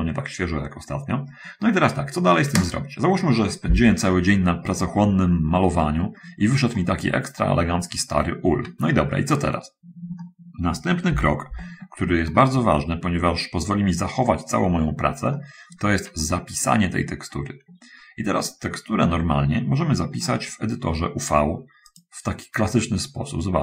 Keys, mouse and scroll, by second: 5.0 middle click, 6.0 middle click, 6.9 middle click, 7.6-8.6 middle drag, 9.4-9.7 scroll up 1, 10.4 shift+middle click, 11.3 shift+1, 12.5 shift+middle click, 13.5-15.4 shift+middle drag, 15.6 middle click, 16.4 middle click, 21.7 click.